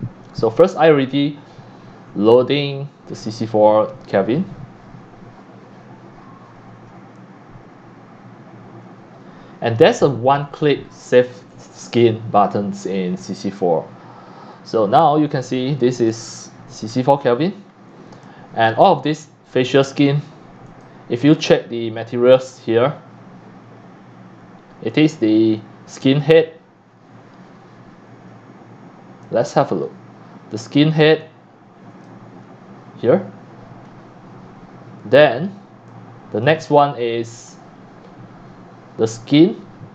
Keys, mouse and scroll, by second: 4.7-14.9 drag, 15.0-15.8 scroll up 7, 15.2 click, 15.9 x, 16.1 x, 16.3 click, 16.9-18.0 scroll up 10, 18.2 c, 18.2-18.6 drag, 20.7 click, 24.9-25.6 drag, 25.7-27.0 drag, 26.9 scroll down 1, 27.1 click, 29.2 click, 31.2 click, 35.9 click, 37.5 scroll up 1.